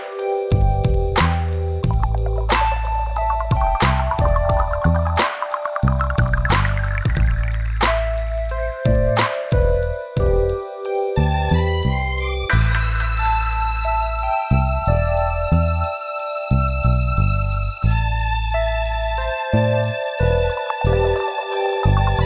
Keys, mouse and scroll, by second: 1.3 click, 3.7 click, 6.8 click, 8.5 click, 10.3 click, 12.4 click, 14.3 click, 16.9 click, 19.9 click, 22.0 click, 22.1 click.